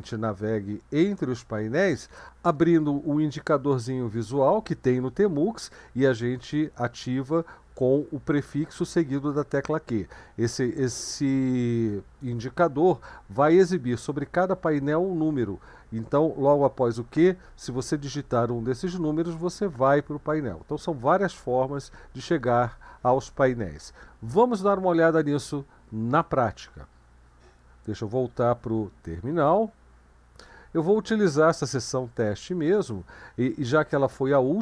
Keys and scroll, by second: 29.4 super+2.